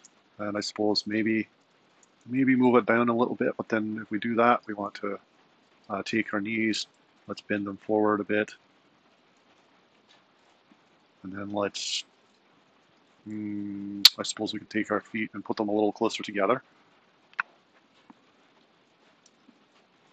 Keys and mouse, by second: 0.1 g, 2.1 g, 4.7 r, 7.5 r, 9.4 r, 11.5 click, 12.1 r, 14.6 click, 15.3 super+Down, 17.6 r, 19.3 click, 19.8 r.